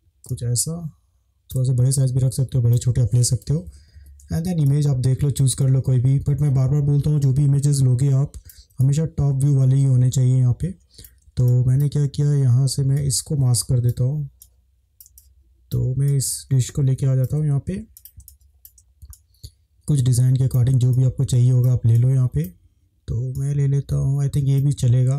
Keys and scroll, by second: 1.9 shift+space, 3.5 ctrl+shift+space, 3.6 ctrl+shift+-, 4.7 ctrl+shift+space, 11.4 ctrl+space, 15.2 space, 17.4 ctrl+z, 18.2 space.